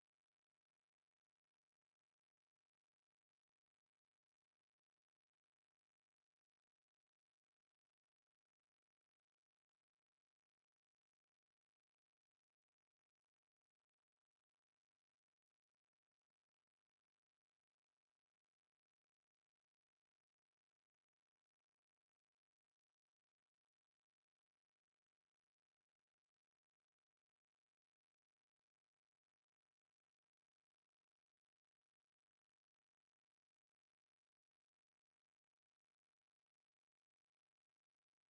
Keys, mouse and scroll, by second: 1.6 r, 6.0 s, 7.5-9.3 middle drag, 8.4 e, 10.0 r, 11.0-13.2 middle drag, 13.5 KP_1, 14.4-16.4 middle drag, 15.2 e, 17.5 r, 20.0 g, 21.9 e, 23.2-26.9 middle drag, 25.8 KP_1, 27.1-29.6 middle drag, 29.1 ctrl+KP_Add, 30.7 x, 32.0 middle click, 33.3 middle click, 34.2-35.3 middle drag, 35.3-36.4 right drag, 36.4 middle click, 37.1 click.